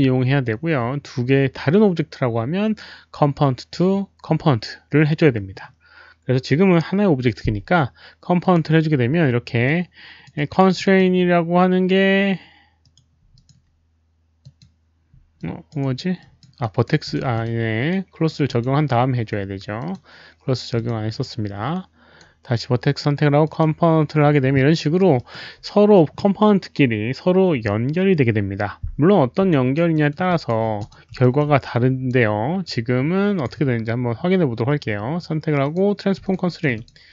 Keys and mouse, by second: 0.0 alt+right click, 8.3 click, 9.6 alt+click, 10.3 alt+right click, 10.7 alt+click, 12.8 alt+click, 13.3 alt+click, 14.4 alt+click, 15.3 alt+click, 15.7 alt+right click, 16.1 alt+click, 16.5 alt+right click, 17.0 alt+click, 17.3 alt+click, 17.8 alt+right click, 18.4 alt+click, 19.7 alt+click, 20.7 alt+click, 21.2 right click, 23.4 click, 24.5 alt+click, 24.7 alt+right drag, 25.1 alt+click, 28.1 click, 29.4 alt+right drag, 29.9 alt+middle drag, 30.2 alt+click, 30.4 alt+right click, 30.7 alt+click, 31.2 alt+middle drag, 31.6-32.0 alt+right drag, 31.7 alt+click, 32.6 alt+click, 34.8 click, 34.8 right click, 35.5 alt+right click, 35.5 alt+middle click, 35.6 click, 36.2 alt+click, 36.4 alt+middle click, 36.7 alt+click.